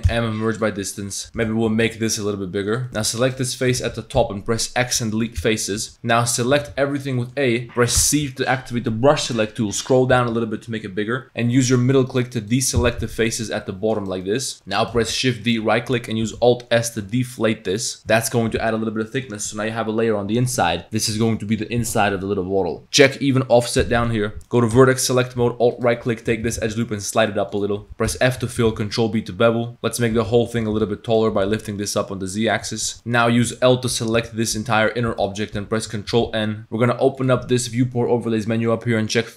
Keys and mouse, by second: 0.1 m, 1.0 click, 1.2 s, 1.4 s, 2.9 ctrl+z, 3.3 click, 3.8 ctrl+z, 4.2 x, 5.8 z, 5.9-6.5 drag, 6.5 a, 6.7 a, 7.2 click, 8.0 c, 13.2 c, 14.2 click, 15.0 shift+d, 16.3 alt+s, 23.9 click, 24.5 click, 24.8 1, 25.7 alt+click, 26.1 click, 26.5 g, 28.1 g, 28.1 f, 28.7 ctrl+b, 29.7 Tab, 29.7-31.3 typing, 32.6 Tab, 32.9 z, 32.9 2, 32.9 a, 33.0 click, 34.2 l, 34.6 z, 34.9 click, 35.1 g, 35.6 z, 35.8 click, 36.1 ctrl+n, 37.2-39.3 drag.